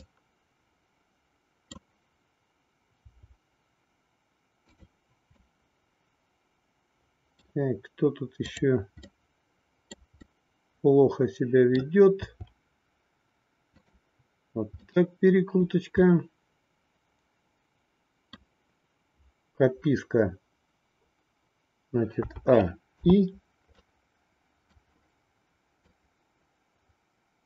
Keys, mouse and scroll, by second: 3.1 r, 5.3-7.4 middle drag, 8.4-9.8 drag, 9.8 middle click, 10.3-11.8 middle drag, 12.3 r, 14.8 middle click, 16.1-18.4 middle drag, 22.2 a, 22.9 i, 23.7-24.7 middle drag, 25.8-27.4 drag.